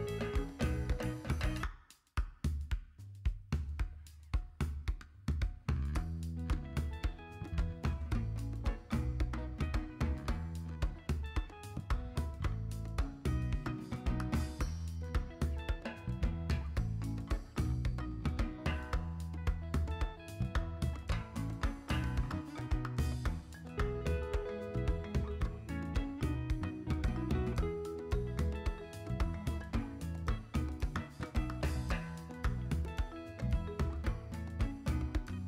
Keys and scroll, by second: 9.1 z.